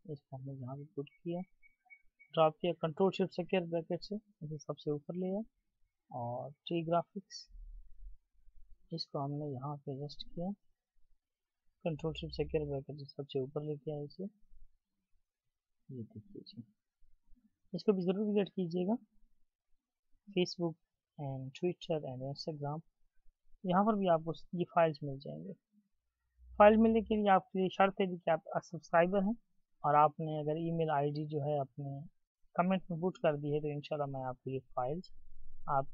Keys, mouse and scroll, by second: 3.5 ctrl+shift+], 12.0 ctrl+s, 12.5 ctrl+shift+], 13.7-14.1 alt+scroll up 1, 17.0-18.4 alt+scroll down 1, 18.4-19.5 scroll down 1, 20.4-21.2 ctrl+scroll down 1, 22.1-27.6 ctrl+scroll down 1, 31.4 alt+shift+click.